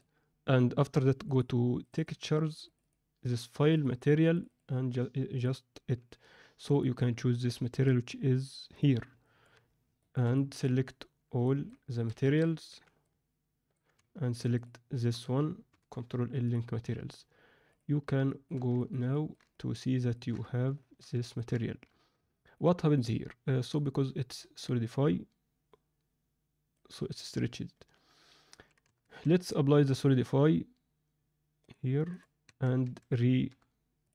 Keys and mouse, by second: 5.3 click, 6.8-8.8 drag, 9.1 middle click, 9.9 shift+middle click, 10.3-10.6 middle drag, 11.4 alt+middle click, 11.9 a, 12.6 b, 14.3 shift+click, 15.7 ctrl+l, 18.2 alt+shift+middle click, 18.7 ctrl+alt+middle drag, 19.1 middle click, 19.5-20.1 ctrl+middle drag, 20.7 alt+shift+middle drag, 21.1 ctrl+middle click, 22.3 middle click, 22.9 click, 23.7-26.7 middle drag, 28.8 Tab, 29.2 Tab, 29.9 click, 31.6-32.1 drag, 32.4 Tab, 32.8 a, 33.4 u.